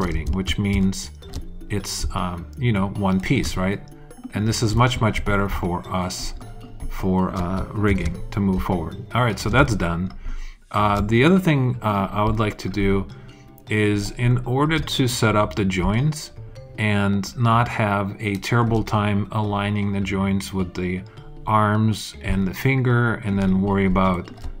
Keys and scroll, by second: 0.2 alt+super+z, 7.9 alt+super+s, 8.4 super+s.